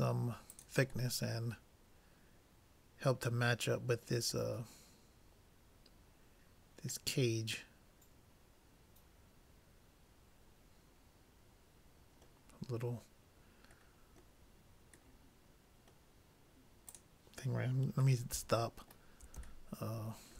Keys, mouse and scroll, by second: 1.2-3.1 middle drag, 4.6-6.4 middle drag, 6.5 middle click, 13.8-17.0 middle drag, 17.0-18.6 drag, 18.4 middle click, 19.4-20.3 middle drag.